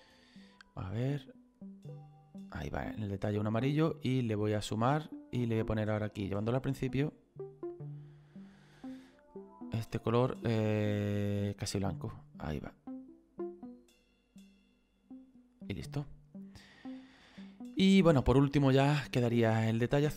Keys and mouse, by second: 4.7 click, 6.3 click, 9.3 click, 11.4 click, 15.7 middle click, 20.0 click.